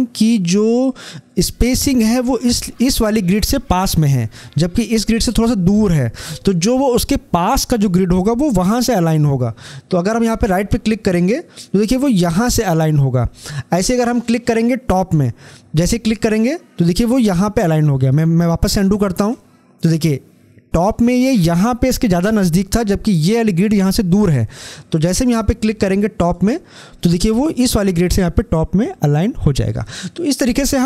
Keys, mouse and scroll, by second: 11.0 click, 16.0 click, 18.8 ctrl+Num_Lock, 18.8 click, 26.1 click.